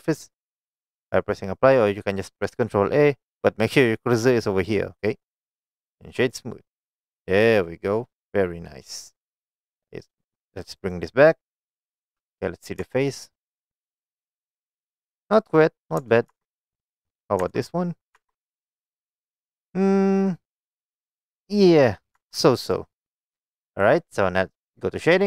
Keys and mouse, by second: 5.8 right click, 6.8 click, 7.1-8.8 middle drag, 10.8 click, 12.1 click, 12.9 Tab, 13.4-15.3 middle drag, 16.1 Tab, 16.4 Tab, 16.8 click, 17.1 click, 17.7 Tab, 17.7 click, 18.2 Tab, 18.7-20.6 middle drag, 22.2 Tab, 23.3-24.0 middle drag.